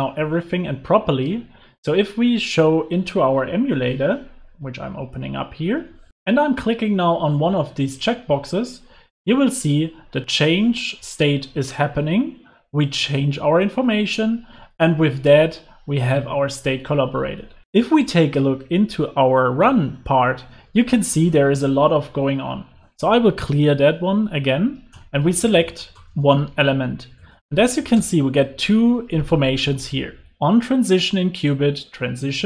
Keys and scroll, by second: 4.7 ctrl+r.